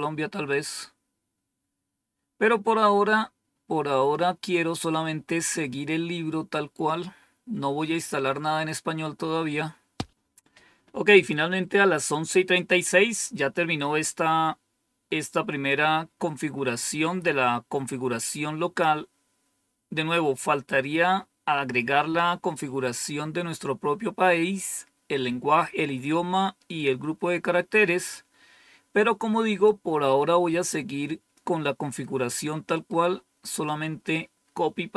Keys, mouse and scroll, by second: 0.6-1.3 scroll up 2, 3.2-4.1 scroll up 2, 7.7-8.8 scroll down 2, 8.8-9.8 scroll down 1, 9.8-17.9 scroll down 1, 17.9-19.2 scroll down 1, 19.2-20.1 scroll down 1, 20.1-29.6 scroll down 1, 29.6-31.3 drag, 33.4 click.